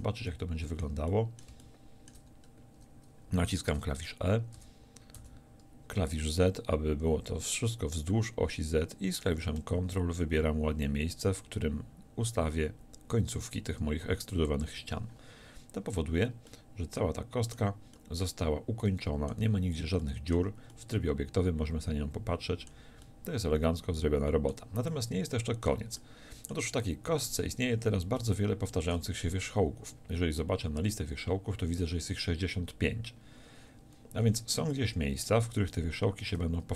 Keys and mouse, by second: 4.6 e, 14.6-20.4 drag, 19.4 a, 20.4 Tab, 27.3 Tab, 27.8 a, 30.7-35.8 middle drag, 34.3 a.